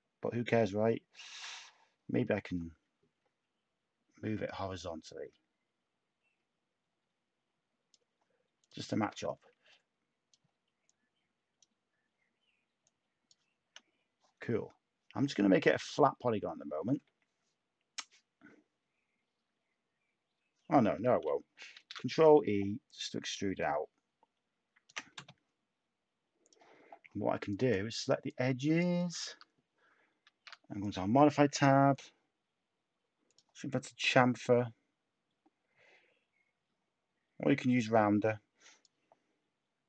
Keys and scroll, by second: 1.6 d, 16.1 e, 30.3 a.